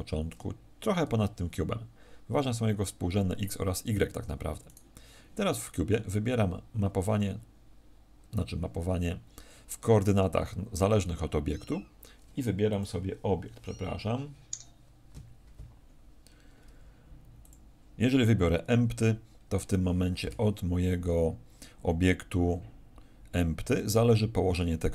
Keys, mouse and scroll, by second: 4.6 right click, 12.6 click.